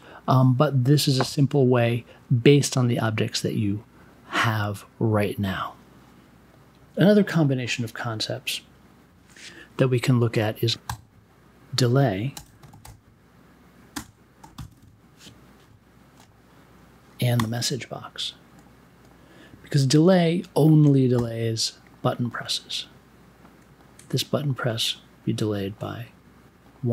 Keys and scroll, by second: 10.8 n, 12.0-14.4 typing, 17.3 m, 21.1 b.